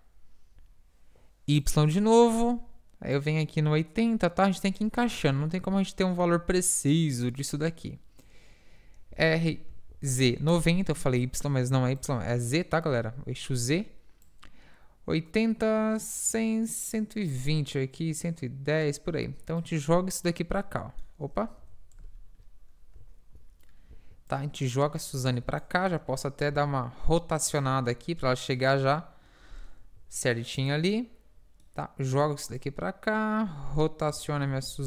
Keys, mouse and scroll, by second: 0.6 i, 1.7 i, 3.2-5.0 drag, 6.9-9.0 drag, 9.1 r, 11.3 i, 14.3-16.2 drag, 19.6-21.2 drag, 21.2 middle click, 21.4 click, 21.6 KP_7, 24.4-26.7 drag, 26.0 r, 27.8 g, 30.0 g, 30.0 i, 32.6-34.7 drag, 34.1 r.